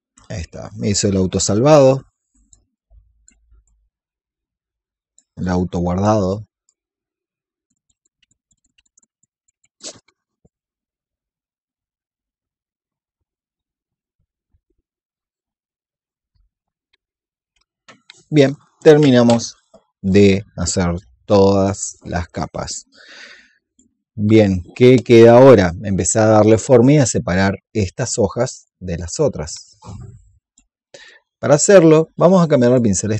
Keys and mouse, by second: 0.4 shift+click, 2.6 click, 3.5 shift+click, 5.3 click, 6.5 shift+click, 7.7 click, 8.1-9.5 drag, 9.6 click, 10.5 click, 11.1 shift+click, 11.5 click, 12.5 shift+click, 12.8 click, 13.3 click, 13.6 shift+click, 14.0 click, 14.5 shift+click, 15.1 shift+click, 20.0 click, 21.2 alt+click, 21.8-24.8 drag, 27.3 click, 29.7 alt+click, 30.9 click.